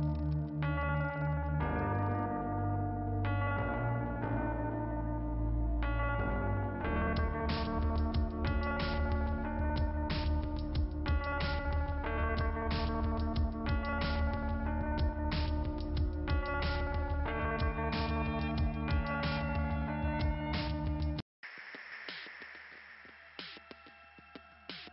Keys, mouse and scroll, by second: 0.0 right click, 0.9 click, 2.0 right click, 2.8 click, 4.1 click, 4.9 click, 7.8-9.0 scroll down 2, 10.3-11.5 scroll down 2, 12.5 click, 13.4 click, 14.4 click, 16.2 right click, 17.1 click, 18.4 click, 19.4 click, 20.3 click, 20.6 click, 20.7 double click, 22.3 click, 22.8 click, 23.8 click.